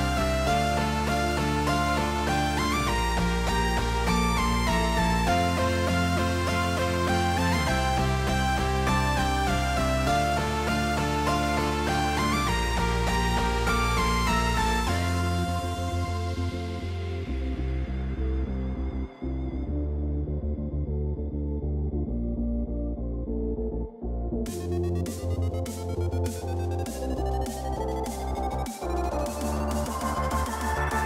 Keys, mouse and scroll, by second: 0.3 click, 0.9 click, 2.6 ctrl+b, 5.8 middle click, 6.7 middle click, 6.9 Tab, 8.0 ctrl+s, 9.0 middle click, 11.4-12.6 drag, 13.6 n, 14.4 middle click, 15.0 click, 17.3 Tab, 19.1 shift+middle click, 20.1 middle click, 22.6 click, 24.6-26.0 drag, 27.8 click.